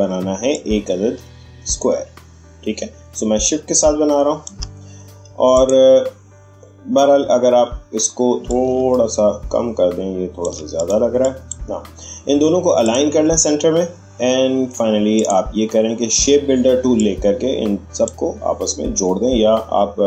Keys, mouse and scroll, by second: 8.4-10.7 drag, 15.1-20.0 drag.